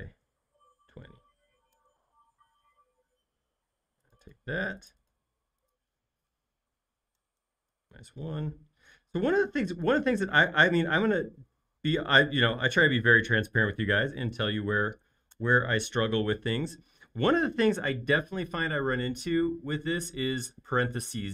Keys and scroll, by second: 0.3-1.2 typing, 1.7 Return, 7.1-8.4 typing, 10.9 Left, 11.1 Left, 11.2 Left, 11.4 Left, 11.5-13.0 Left, 13.3 Left, 14.3 shift+9, 15.3 Return.